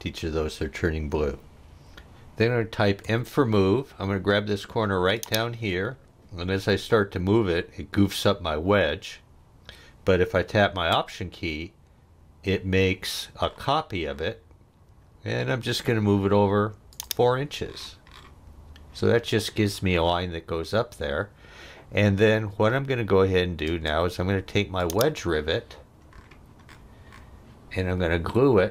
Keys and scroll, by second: 3.1 m, 23.7 space.